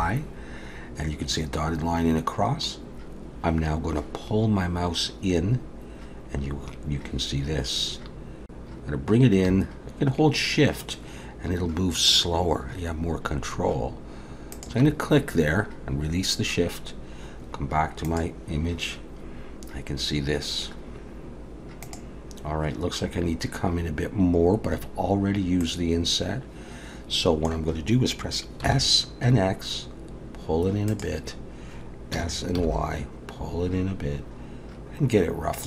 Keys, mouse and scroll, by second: 25.6 middle click, 28.6 s, 32.1 s.